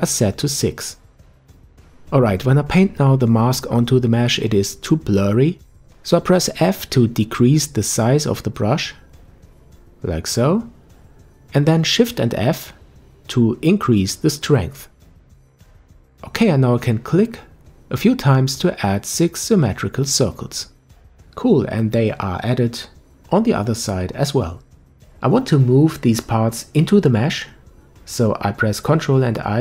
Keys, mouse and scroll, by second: 1.3-4.4 drag, 5.1 ctrl+z, 7.4 f, 11.1 shift+f, 17.9-21.2 drag, 21.2-22.2 middle drag, 22.2-22.7 scroll down 2, 22.7-24.8 middle drag, 24.8-26.7 scroll up 1, 26.7 ctrl+i.